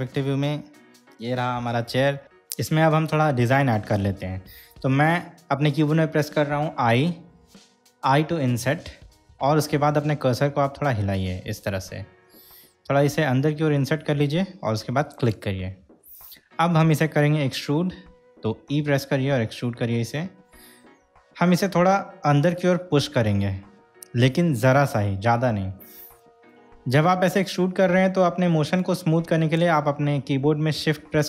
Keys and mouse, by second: 7.4 i, 15.4 click, 18.9 e.